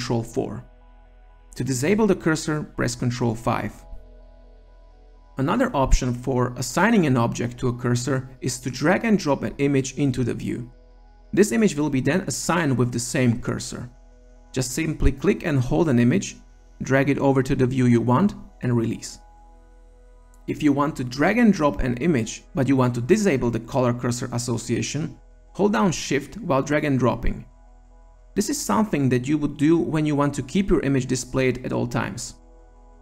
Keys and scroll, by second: 2.6 ctrl+5.